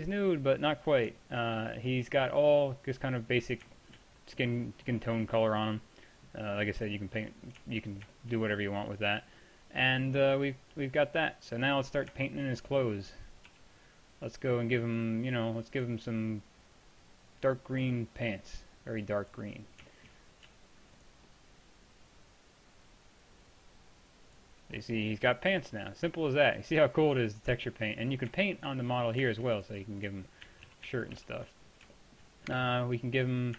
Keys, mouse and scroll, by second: 1.1-1.7 middle drag, 1.9 middle drag, 3.0-6.0 middle drag, 6.6 middle click, 7.0-7.4 middle drag, 13.2 t, 13.5 t, 18.2 click, 18.6-20.4 drag, 20.5 f, 27.9 middle drag, 29.4 middle drag, 29.7-30.7 drag, 30.7 ctrl+z, 30.9 ctrl+z, 31.2 ctrl+z, 31.7 drag.